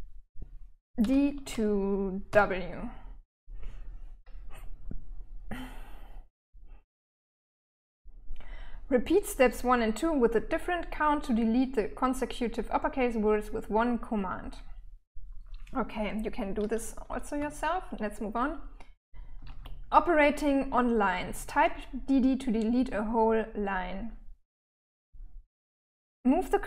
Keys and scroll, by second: 0.4 d, 0.8 2, 1.7 w, 16.8-19.0 typing.